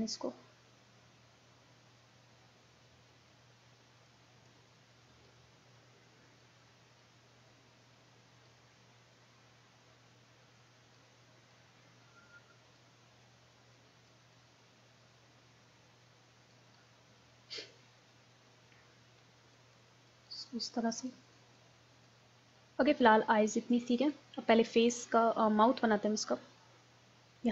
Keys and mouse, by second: 2.3-13.5 drag, 13.8-16.2 drag, 16.8 middle click, 19.6-22.6 drag, 22.6 middle click, 24.0-25.9 drag.